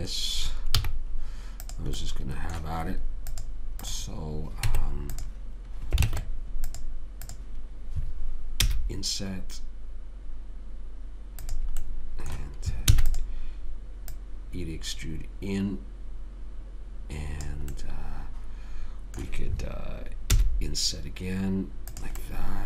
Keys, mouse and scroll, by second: 1.1 z, 2.4-3.6 middle drag, 3.6-5.8 drag, 5.0 Tab, 6.4 ctrl+Tab, 7.6 click, 9.0 i, 13.2 e, 14.4 click, 18.1-20.6 middle drag, 20.6 i.